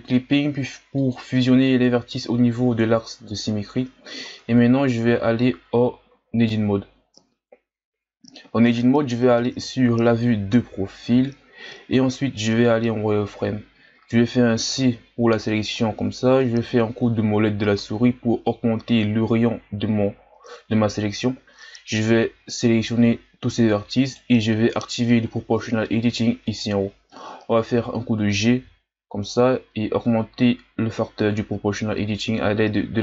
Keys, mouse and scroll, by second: 0.0-1.9 drag, 1.9-3.6 scroll up 2, 3.6-4.5 scroll down 1, 4.5-5.1 ctrl+scroll down 1, 5.1 z, 5.9-7.1 shift+scroll down 4, 7.1 Tab, 9.4 KP_3, 11.1 n, 12.0-12.8 ctrl+scroll down 2, 12.8 z, 14.6 c, 26.5-27.7 drag, 27.7 g.